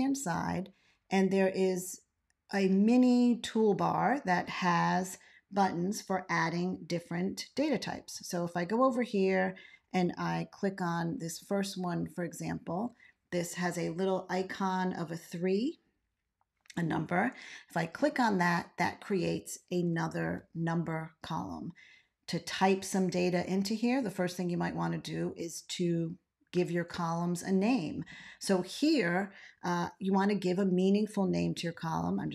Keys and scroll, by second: 7.9 ctrl+x, 10.5 ctrl+z, 20.1 ctrl+x, 31.7 x.